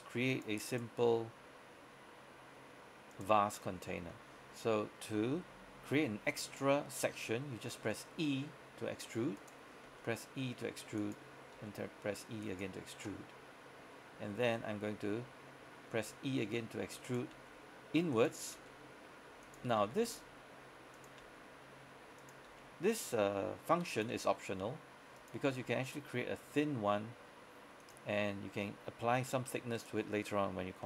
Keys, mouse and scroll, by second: 0.4 click, 0.8 right click, 1.1 g, 3.2 click, 3.6 scroll up 1, 3.7-6.7 scroll down 1, 7.9 e, 9.5 click, 9.9 e, 11.0 click, 12.5 click, 13.8 scroll up 1, 16.0 e, 17.1 click, 17.4 e, 18.2 click, 18.6 e, 19.9 click, 19.9 e, 21.0 click, 21.3 e, 22.3 click, 22.6 e, 24.0 click, 24.2 e, 25.2 click, 25.6 e, 27.9 click, 29.9 right click.